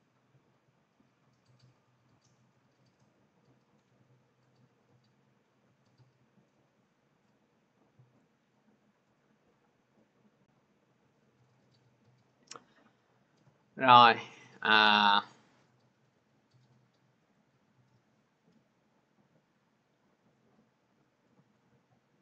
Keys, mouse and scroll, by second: 1.0-6.2 drag, 7.8-8.9 drag, 11.2 click, 14.2 click, 17.3 click, 20.1 click.